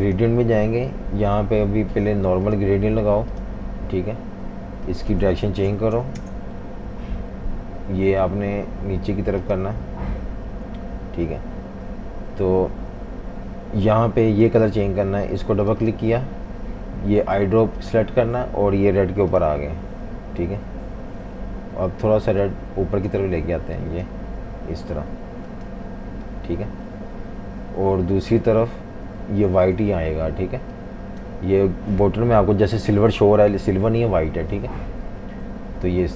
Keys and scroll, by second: 5.6-6.2 typing, 12.9 F19.